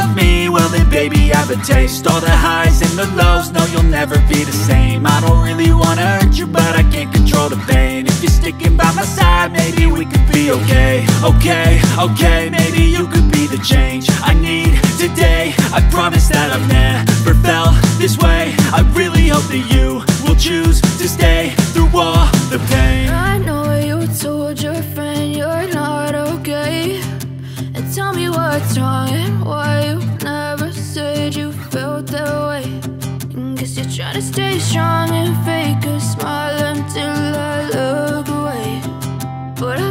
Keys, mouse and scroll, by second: 0.1 click, 2.3-2.8 drag, 4.1-5.0 scroll up 3, 5.0 Tab, 6.4 KP_Subtract, 6.7 KP_Add, 6.8 KP_Add, 7.4 ctrl+i, 9.8 x, 12.3 ctrl+z, 12.8 KP_Subtract, 14.3 Tab, 15.0 ctrl+Tab, 15.1 click, 15.6 h, 15.8 click, 16.2 Tab, 17.0 x, 19.2 KP_Decimal, 20.1 2, 20.3 click, 20.9 x, 22.0 click, 22.4 x, 23.3 click, 23.5 x, 24.2 click, 24.5 x, 26.3 scroll down 4, 26.8-29.6 alt+drag, 29.6 x, 30.4 Tab, 31.8 click, 33.0 click, 34.0-36.6 drag, 37.0 click, 38.1 click, 39.2 click.